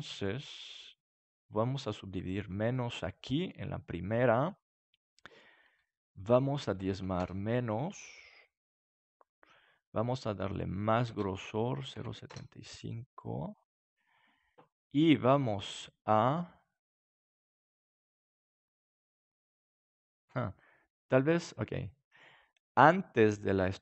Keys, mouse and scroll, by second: 1.7-3.4 drag, 2.7-4.5 middle drag, 6.6-8.3 drag, 6.6-7.7 middle drag, 8.1-12.3 middle drag, 10.5-12.3 drag, 13.2-17.6 middle drag, 20.9-22.9 drag.